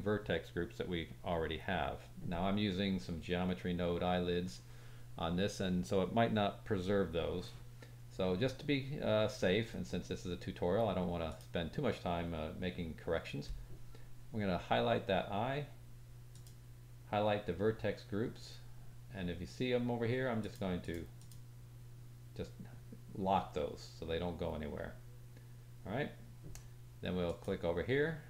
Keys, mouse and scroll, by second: 11.2 middle click, 11.2 right click, 16.3 click, 20.3 click, 20.8 click, 21.1 click, 27.2 click, 27.7-28.2 drag.